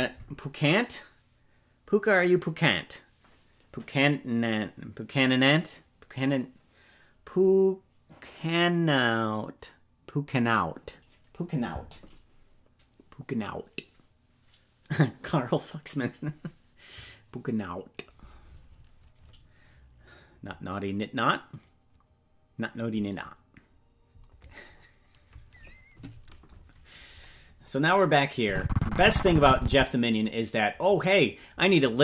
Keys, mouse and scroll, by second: 28.4-29.8 drag.